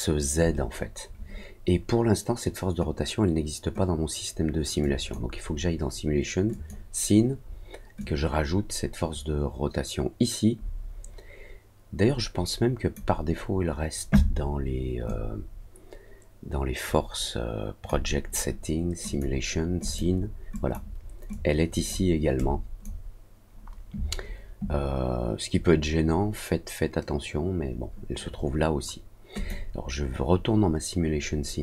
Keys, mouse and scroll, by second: 4.8 click, 6.5 click, 7.9-12.9 drag, 15.0-17.8 drag, 19.0 click, 19.8 click, 20.5 click, 21.3 click, 22.3 click, 29.3 click.